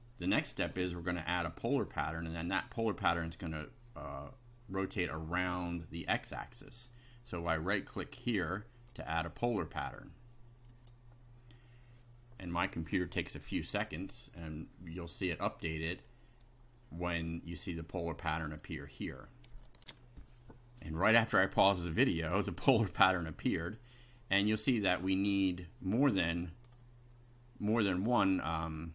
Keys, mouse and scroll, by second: 8.9 right click, 10.7 click, 19.8 ctrl+r, 23.6-24.3 middle drag, 26.0-26.8 drag.